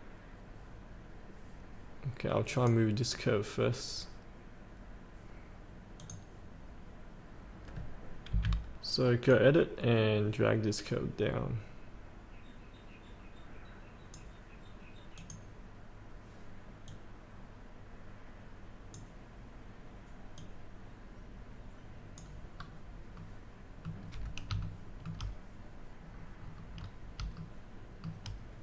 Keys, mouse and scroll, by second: 2.5 click, 8.3 F8, 9.4-22.6 drag, 22.6 scroll down 1, 24.6 shift+middle click, 26.2 scroll down 1, 27.5 shift+middle click.